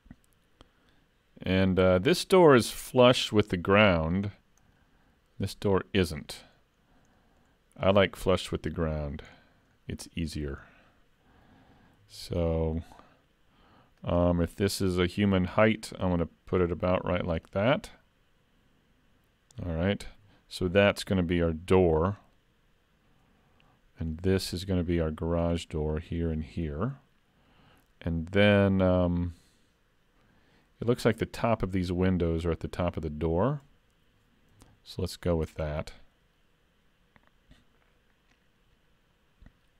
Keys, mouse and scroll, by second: 2.3-2.6 scroll up 3, 2.6 middle click, 3.3-4.3 scroll up 1, 4.3-4.8 scroll down 1, 4.8 middle click, 4.8-5.6 scroll down 2, 6.8-7.2 scroll up 2, 7.2 middle click, 8.9-9.4 scroll up 1, 9.4-9.8 scroll down 1, 9.8-10.1 scroll down 4, 10.1 middle click, 12.0 ctrl+r, 20.2 3, 20.6 click, 21.2 shift+click, 24.1 click, 24.5 shift+click, 26.0 click, 26.4 shift+click, 34.5 ctrl+r.